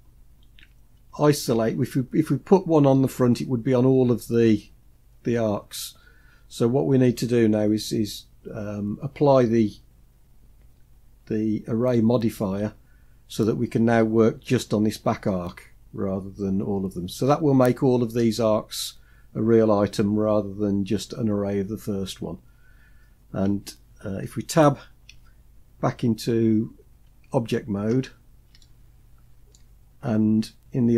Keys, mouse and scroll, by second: 0.7 Tab, 23.5-24.8 scroll up 1, 24.8 Tab, 26.2 Tab, 27.7 scroll up 1, 28.3-29.3 shift+middle drag.